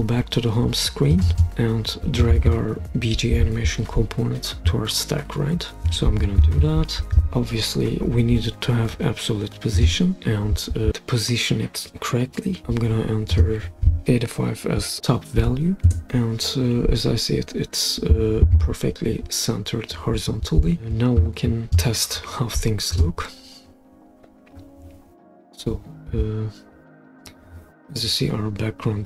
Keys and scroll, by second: 15.0 8, 15.4 5, 15.9 Return.